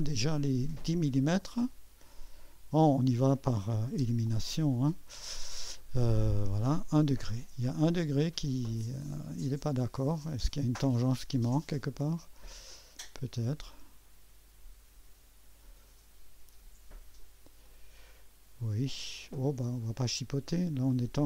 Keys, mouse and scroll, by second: 0.5 click, 2.2 click, 3.5-4.5 typing, 7.1 click, 11.6-17.0 drag, 17.7-21.2 drag.